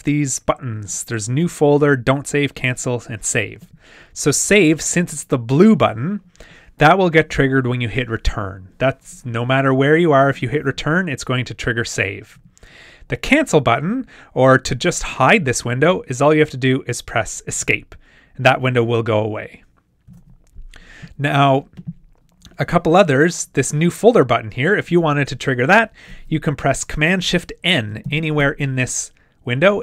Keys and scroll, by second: 20.1 super+w, 28.0 shift+super+n.